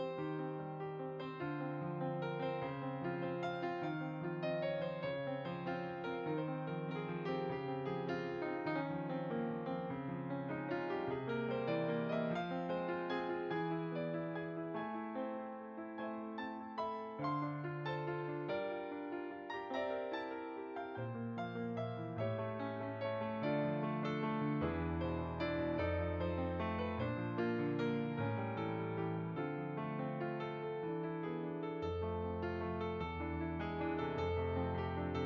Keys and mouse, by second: 0.4 click, 2.1 middle click, 2.6 click, 3.3 middle click, 3.6 click, 4.4 shift+click, 4.8 middle click, 5.3 click, 6.2 middle click, 6.6 click, 7.3 middle click, 7.6 shift+click, 8.2 shift+middle click, 8.5 click, 9.6 middle click, 10.2 click, 12.3 middle click, 14.7 click, 15.1 click, 15.9 click, 23.7 shift+click, 26.3 click, 27.0 shift+click, 27.7 shift+click, 28.2-29.1 typing, 28.8 click, 30.8 shift+click, 32.9 middle click.